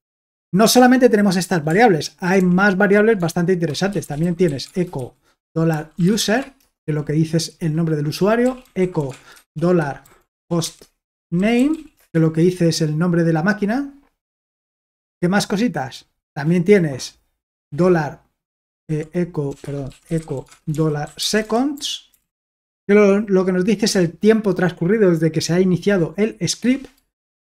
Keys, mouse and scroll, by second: 2.4 ctrl+l, 3.7-6.7 typing, 8.2-12.2 typing, 14.6-15.9 scroll down 1, 15.9-16.6 scroll down 1, 16.6-17.7 scroll down 1, 18.8-22.9 typing, 23.9 Return.